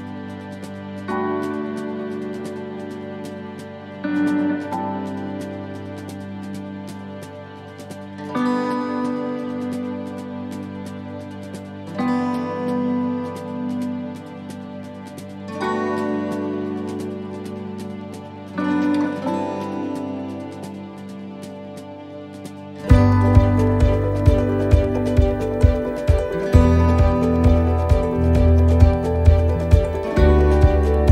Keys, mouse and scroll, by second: 0.5 scroll up 2, 0.9 shift+middle click, 2.9 click, 4.2 right click, 5.7 click, 8.7 click, 15.1 click, 18.1 click, 23.0 click, 23.0 middle click, 24.1 right click, 24.7 shift+middle click, 26.4 click, 27.2 shift+middle click, 27.8 middle click, 29.4 click.